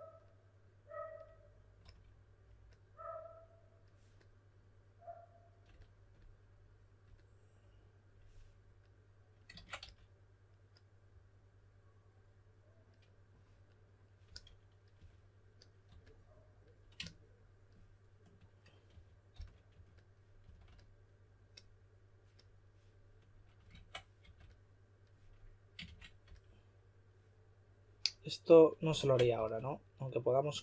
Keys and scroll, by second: 1.8 typing, 9.5 super+z, 9.7 s, 14.2-15.8 typing, 18.6-20.4 typing, 23.7 super+z, 24.2 2, 26.2 s, 29.0 super+z, 29.3 s.